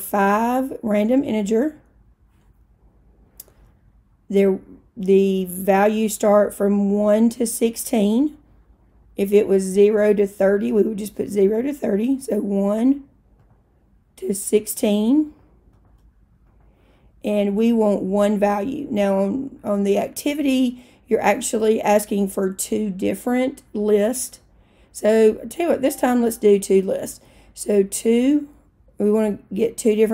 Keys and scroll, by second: 1.1 5, 13.4 Down, 15.3 1, 15.8 6, 16.5 Return, 28.3 2.